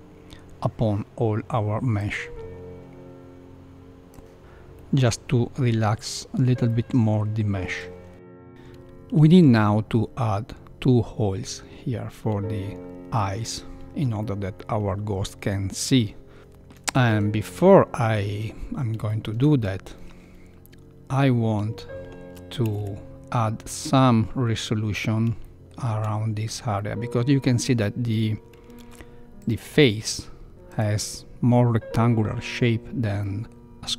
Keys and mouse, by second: 2.1-4.1 drag, 4.8 middle click, 6.6 middle click, 14.2-15.9 middle drag, 16.4 shift+middle click, 16.4 shift+KP_1, 17.1 Tab, 17.6 middle click, 19.0 shift+middle click, 19.5 middle click, 22.6 a, 22.7 a, 25.4 shift+middle click, 26.7 middle click, 28.7 ctrl+3, 29.3 click, 30.0 click, 30.6 click, 33.1 middle click.